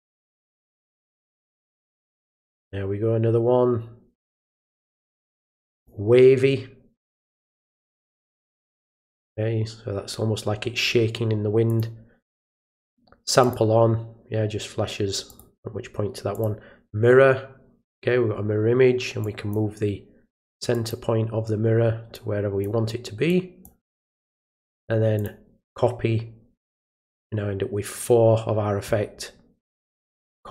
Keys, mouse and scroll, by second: 0.4 click, 1.6 click, 4.6 click, 5.8 click, 8.0 click, 11.7 click, 13.4 click, 15.3 click, 16.3 click, 19.2-19.5 drag, 20.7 click, 22.1 click, 23.3 click, 24.0 click, 25.1 click, 30.1 click.